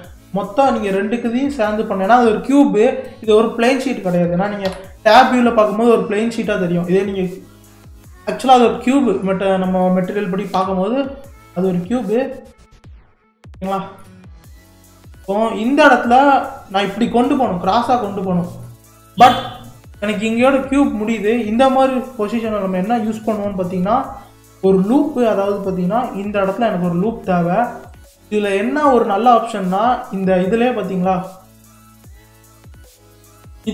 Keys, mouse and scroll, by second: 1.5 shift+click, 2.1-4.7 middle drag, 4.7 KP_3, 6.5-7.3 scroll down 6, 7.3-8.0 scroll up 7, 8.0 middle click, 8.7-9.3 scroll down 2, 9.3-10.5 middle drag, 10.5 KP_3, 11.3 scroll up 4, 11.6-12.5 scroll down 3, 12.5-13.2 scroll down 1, 13.2-17.8 shift+middle drag, 18.1-18.7 scroll down 2, 18.7-20.1 shift+middle drag, 20.1-21.1 scroll up 2, 21.1-22.0 scroll up 1, 22.0-23.0 scroll down 4, 23.0-26.1 shift+middle drag, 27.9-28.5 scroll up 1, 28.5-31.5 shift+middle drag.